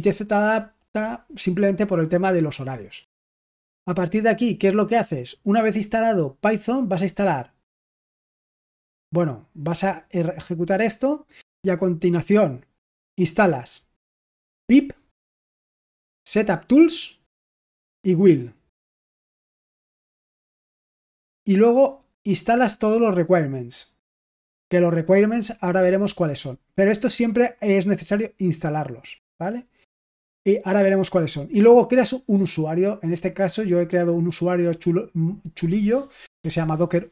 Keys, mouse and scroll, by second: 8.3 click, 9.8-11.0 drag, 14.6 click, 14.9 click, 15.5 click, 16.3 click, 16.4 click, 17.8 click, 18.1 click, 22.2 click, 23.5 click, 23.7 click, 27.7-29.1 drag, 33.7-34.8 drag.